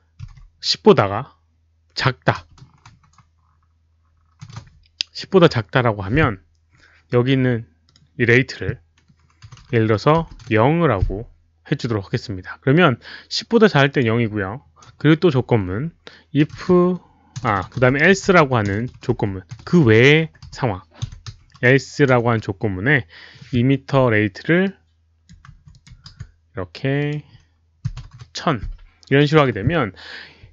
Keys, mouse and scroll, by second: 0.1-0.8 typing, 2.6 space, 7.8 click, 9.4 Left, 9.9-10.9 typing, 10.2 click, 13.9 click, 14.9 Return, 16.4-18.5 typing, 16.7 click, 17.3 click, 17.8 click, 24.6 click, 25.4 ctrl+c, 25.7 click, 26.1 ctrl+v, 27.0 click, 27.6-28.5 typing.